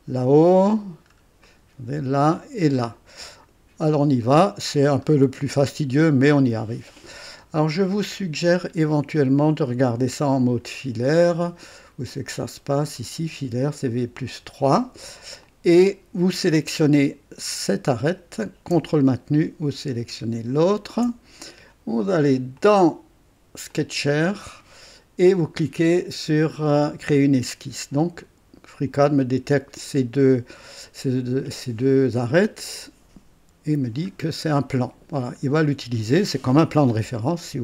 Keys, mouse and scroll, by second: 0.7-1.3 scroll down 2, 1.5 right click, 3.2 right click, 3.8-4.1 scroll up 1, 4.2 right click, 5.1 scroll up 1, 5.3 right click, 6.1 scroll down 1, 6.5 right click, 12.1 click, 13.9 click, 15.4-16.9 drag, 18.0 click, 20.8 ctrl+click, 22.5 click, 23.8 click, 27.1 click, 32.8 click, 34.1 scroll down 1, 34.6 right click, 35.5 scroll up 2.